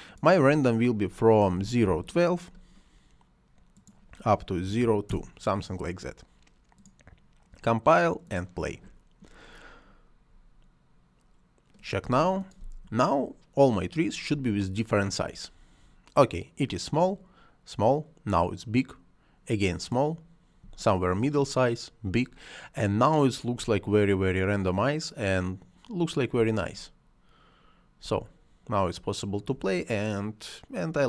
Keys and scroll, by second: 1.4 ., 1.7 1, 2.8 2, 4.3-5.2 typing, 11.9 space, 14.2 space, 20.4 space, 23.4 space, 26.2 space, 27.9 space.